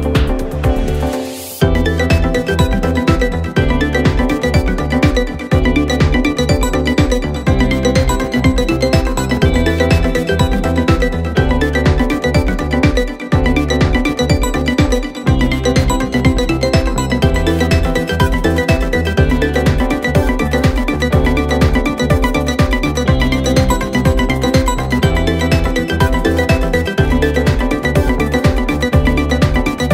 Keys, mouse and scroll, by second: 0.8 alt+h, 1.3 click, 1.5-1.9 middle drag, 1.9 click, 2.2-3.0 middle drag, 3.0 h, 3.2 z, 4.0 ctrl+z, 4.3 g, 5.6 click, 5.8 middle click, 6.8 click, 7.3 shift+d, 8.0 r, 9.7 KP_1, 10.4 s, 11.2 scroll up 4, 11.9 x, 12.7 s, 14.8 g, 17.0 KP_7, 17.4-18.3 scroll down 2, 18.3 click, 20.1 g, 22.0-22.8 middle drag, 22.8 KP_7, 23.3 shift+d, 23.8 g, 25.5-26.1 middle drag, 26.1 shift+click, 26.8 click, 27.0-27.4 scroll down 4, 27.4 KP_3, 27.6 KP_1, 28.2 g, 29.6 shift+d.